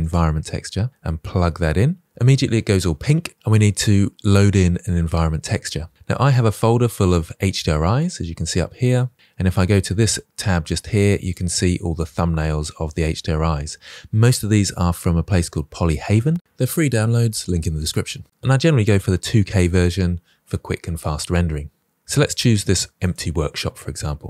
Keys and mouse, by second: 1.2-1.6 drag, 5.5 click.